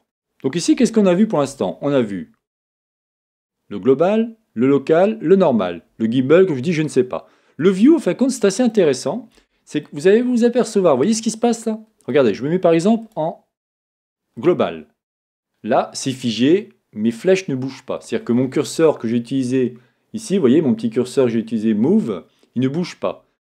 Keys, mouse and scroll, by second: 0.0-2.6 middle drag, 0.0-0.6 scroll down 2, 2.6-6.9 drag, 8.3 middle click, 9.9 middle click, 10.3-13.0 middle drag, 13.0-15.1 drag, 15.2-17.8 middle drag, 18.1-23.4 middle drag, 18.1-19.7 scroll up 2, 19.7-22.2 scroll up 1.